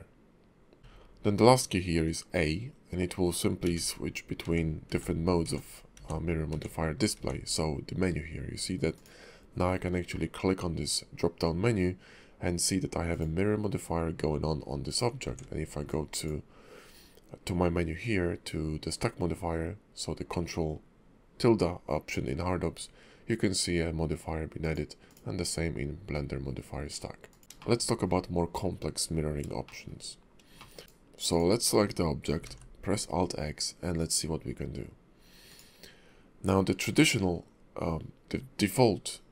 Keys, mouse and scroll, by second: 0.8 alt+x, 0.8 click, 0.8 scroll up 1, 8.9 click, 13.1 click, 15.2 ctrl+`, 25.1 click, 27.5 shift+middle click, 27.5 scroll up 1, 27.6 ctrl+`, 28.0-28.6 shift+scroll down 1, 29.1-29.5 scroll down 1, 29.6 shift+middle click, 30.0-30.4 scroll up 2, 30.6 shift+middle click, 31.3 click, 32.4 alt+x, 33.9 click, 35.5 click.